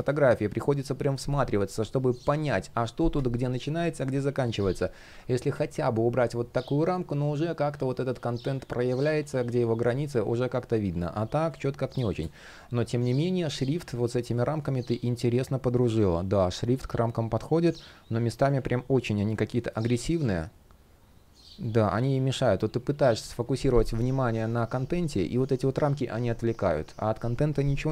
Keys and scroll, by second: 9.5 super+z.